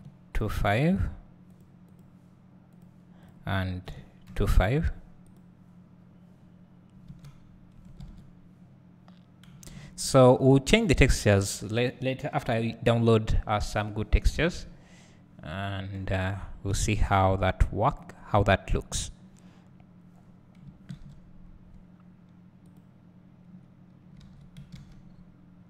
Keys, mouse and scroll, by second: 2.0 click, 5.3 click, 6.4 scroll down 2, 7.5 scroll up 1, 13.3 scroll down 1, 14.7-15.4 scroll up 2, 15.4-17.0 scroll down 2, 17.0-17.3 scroll down 1, 17.8-19.6 scroll up 2, 19.6-20.3 scroll up 1, 20.3-21.7 scroll down 2, 21.7 scroll down 1, 22.8 click, 24.3 alt+a, 25.2-25.6 scroll up 2.